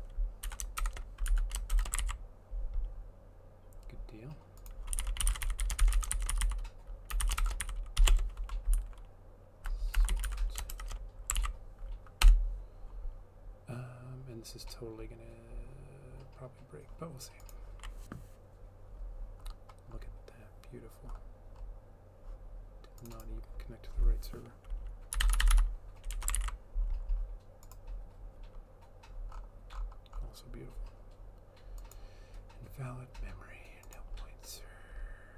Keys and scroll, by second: 0.0-2.3 typing, 1.3 End, 4.7-11.3 typing, 10.3 End, 11.5 ctrl+s, 12.3 Return, 24.9-26.2 typing, 26.4 ctrl+s.